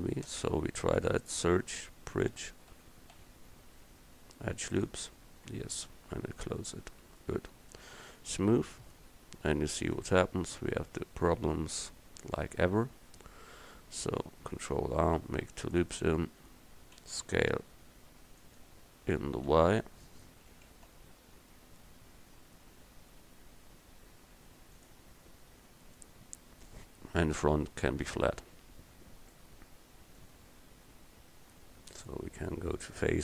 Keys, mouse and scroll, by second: 0.4 space, 5.8 Tab, 10.0 Tab, 14.7 ctrl+r, 17.0 s, 19.6 y, 20.6 s, 25.5 Tab, 26.0 middle click, 28.4 Tab, 29.6-30.6 drag.